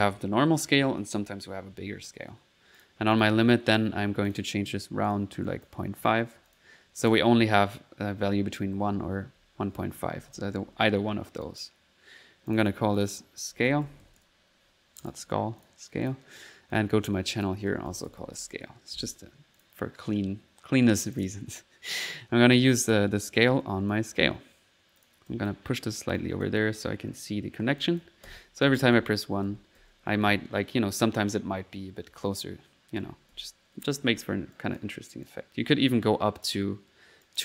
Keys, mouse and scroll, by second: 2.8 click, 3.2 click, 4.3 click, 5.1 click, 5.1-6.0 typing, 5.3 click, 7.0 click, 8.9-10.8 typing, 11.4 click, 12.5 click, 13.0 click, 15.0 click, 16.0 click, 16.7 click, 17.3 click, 19.6 click, 21.2 click, 23.0-24.0 drag, 24.1 click, 25.0 click, 26.2 click, 27.8 click, 28.1-30.7 typing, 32.9-34.6 typing, 34.6 click, 35.3 click, 36.4 click, 37.2 click.